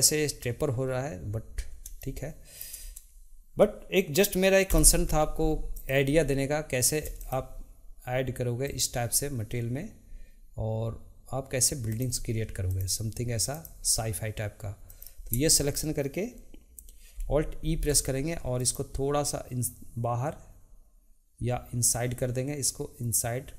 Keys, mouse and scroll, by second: 2.0-4.7 shift+middle drag, 4.7 3, 5.7 alt+click, 7.1 alt+shift+click, 8.6 alt+shift+click, 11.9 alt+shift+click, 12.6 alt+shift+click, 13.5 alt+shift+click, 14.9 alt+shift+click, 17.6 alt+e.